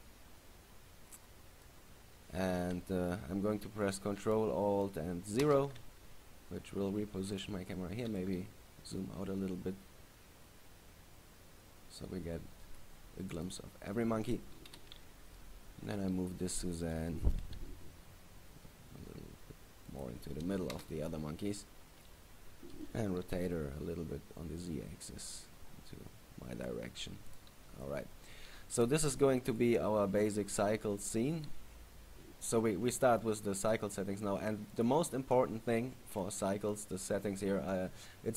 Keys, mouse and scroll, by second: 5.6 ctrl+alt+KP_0, 7.5 right click, 8.1 g, 13.8 click, 14.8 KP_7, 15.5-16.5 scroll down 9, 17.0 right click, 17.6 g, 20.2 click, 20.9 KP_0, 23.1 r, 27.5 click, 29.6 right click, 31.1 right click, 32.1 scroll up 1, 34.9 click, 35.2-36.3 scroll down 3.